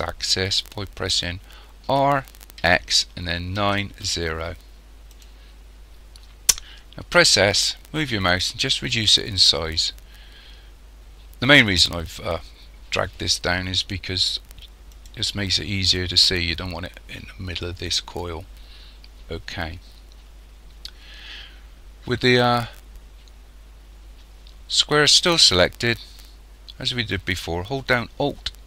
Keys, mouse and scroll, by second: 1.9 r, 7.2 s.